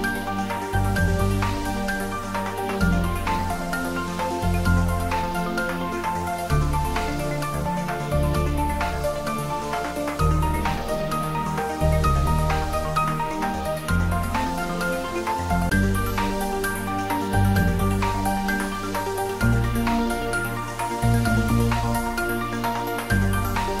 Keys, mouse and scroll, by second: 1.4 r, 3.6 click, 4.3 g, 7.5 click, 9.5 z, 10.1 scroll down 1, 10.5-11.1 middle click, 11.3 click, 11.7-12.7 scroll up 1, 12.7 click, 13.2-13.6 scroll up 1, 15.4-16.7 middle drag, 16.9-17.5 scroll down 1, 17.5 Tab, 18.1 click, 18.6-20.4 scroll up 1, 20.9 click.